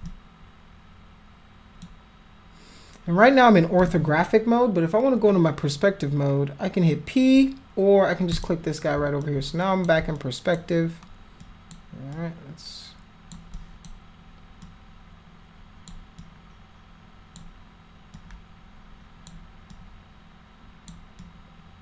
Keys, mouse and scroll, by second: 0.0-1.8 drag, 8.3 click, 9.2 alt+click, 10.1 alt+click, 11.4 alt+click, 12.1-13.3 alt+drag, 13.5 alt+click, 14.6-15.9 alt+drag, 16.2-17.3 alt+drag, 18.1-19.2 alt+drag, 19.7-20.8 alt+drag, 21.2 alt+click.